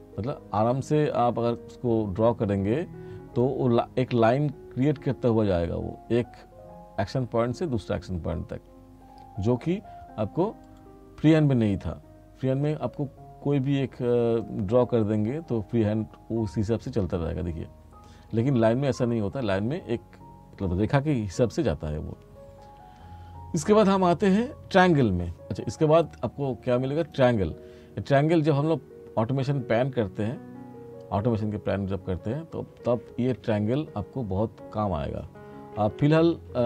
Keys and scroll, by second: 36.1 ctrl+z.